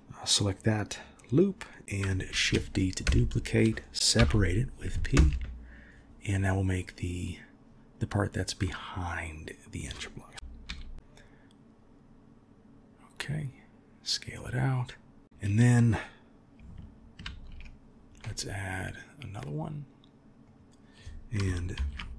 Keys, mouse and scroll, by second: 2.3 shift+d, 4.2 p, 8.6-9.6 middle drag, 17.2 ctrl+r, 21.8 ctrl+b.